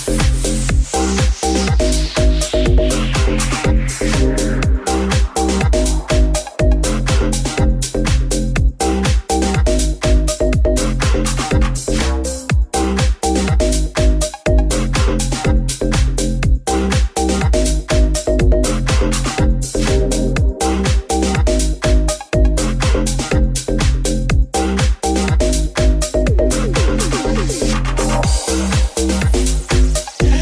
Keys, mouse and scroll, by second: 0.6-4.9 middle drag, 5.1-6.2 shift+middle drag, 6.2 middle click, 6.8 middle click, 7.5 ctrl+middle click, 8.7-12.0 middle drag, 9.6 Tab, 11.7 g, 12.0-14.3 middle drag, 15.2-20.3 middle drag, 17.4 Tab, 17.9 Tab, 20.3 click, 21.5-30.4 drag, 22.7 Tab, 23.9 middle click, 23.9 right click, 26.4 alt+z, 28.0 alt+z, 28.4 Tab.